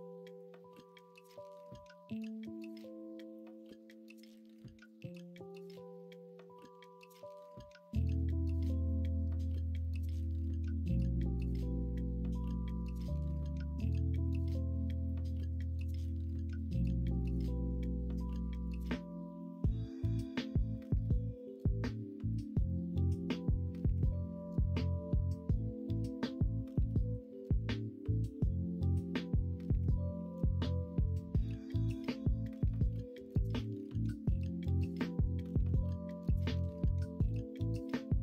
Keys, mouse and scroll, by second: 0.9 middle click, 4.9-6.3 drag, 6.7 ctrl+z, 7.6 middle click, 14.2 middle click, 14.7 ,, 17.7-18.7 drag, 18.7 middle click, 27.6 ctrl+b, 30.9 3, 31.8 s, 34.2-37.6 middle drag, 37.6 l, 37.9 l.